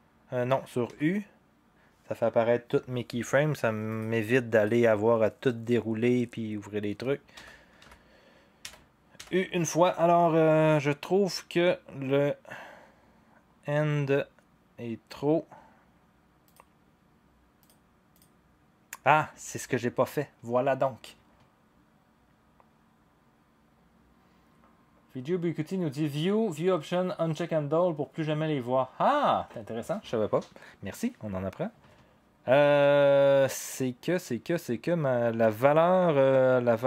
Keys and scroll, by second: 0.8 u, 7.5 u, 7.8 u, 8.7 u, 9.2 u.